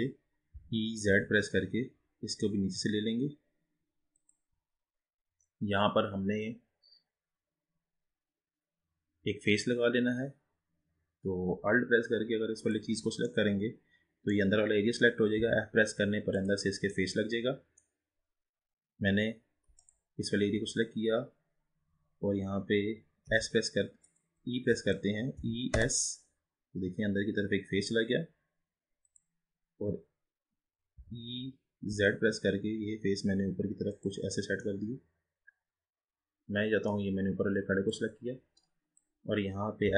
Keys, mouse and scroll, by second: 0.6 e, 12.6 alt+click, 13.3-15.4 middle drag, 15.4 f, 16.4 click, 17.0-18.2 middle drag, 18.2-19.8 scroll up 1, 19.8 alt+click, 23.3 s, 24.8 ctrl+z, 25.5 e, 31.0 e, 34.6-37.3 middle drag, 37.3-38.0 scroll down 4, 38.0 click, 39.9 s.